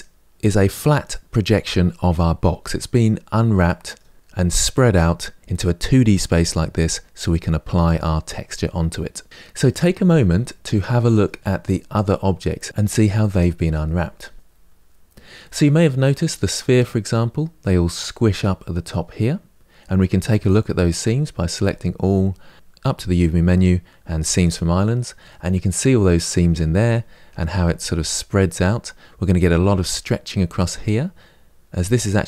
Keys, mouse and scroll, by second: 3.4-9.3 middle drag, 9.3-9.7 scroll down 2, 9.9-14.2 shift+middle drag, 14.2 Tab, 14.3-15.3 shift+middle drag, 15.3-16.3 scroll up 4, 16.3-20.8 middle drag, 20.8 Tab, 21.3 a, 24.2 click, 25.1-32.2 middle drag.